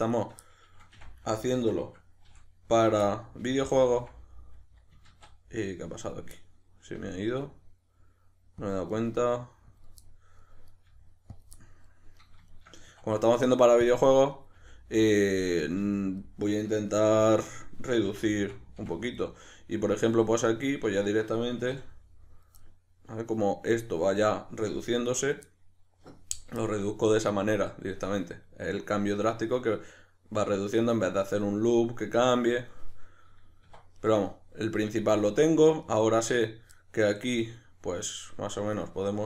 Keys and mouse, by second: 0.1 shift+right click, 0.4-5.5 middle drag, 0.9 f, 3.4 f, 5.1 ctrl+z, 6.0 right click, 6.4-8.7 middle drag, 7.0 g, 8.7 click, 8.9 right click, 9.0 g, 9.8 click, 10.0 middle click, 10.7 right click, 10.9 g, 11.4 click, 11.6-12.2 middle drag, 12.2 right drag, 12.5 shift+right click, 12.8 w, 14.3 right click, 14.6 g, 15.4 click, 15.6 right click, 15.8 g, 16.2 click, 17.0 2, 17.4 right click, 18.1 f, 19.2-20.4 middle drag, 20.4 right click, 21.0 shift+right drag, 21.7 f, 22.6-33.9 middle drag, 33.9 right click, 35.8 right click, 36.8 middle click.